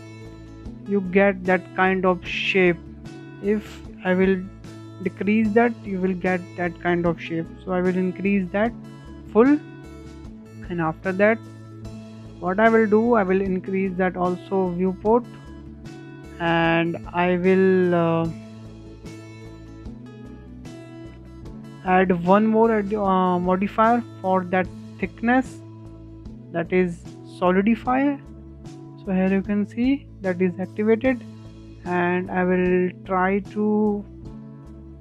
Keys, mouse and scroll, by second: 2.0-2.3 scroll down 5, 2.3-4.0 middle drag, 4.0-7.0 drag, 8.3-8.6 scroll up 4, 8.6 shift+middle click, 9.0 scroll down 1, 9.2-9.6 shift+middle drag, 9.6-9.9 scroll up 1, 9.9-11.8 shift+middle drag, 11.8-14.8 drag, 14.8-15.3 shift+middle drag, 15.3 scroll down 2, 15.7-17.7 shift+middle drag, 17.7-20.7 drag, 20.9 click, 21.5 click, 22.5 click, 23.2-24.9 scroll up 3, 24.9-27.5 drag, 27.5 scroll up 1, 27.8 shift+middle click, 28.3-28.8 scroll up 2, 28.8-30.5 shift+middle drag, 30.5-33.6 drag, 34.7-35.0 scroll down 3.